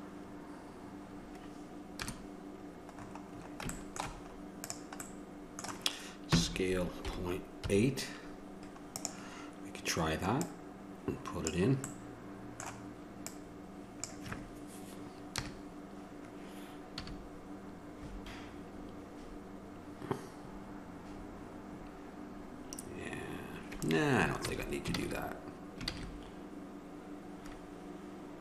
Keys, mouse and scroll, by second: 2.2 KP_0, 3.6-4.9 middle drag, 4.9 right click, 5.4 middle click, 5.5 click, 5.6-9.2 middle drag, 11.7 click, 12.1 middle click, 12.5 click, 12.9 click, 13.6-14.7 middle drag, 14.7 click, 15.6 KP_0, 17.2 a, 25.2 ctrl+z.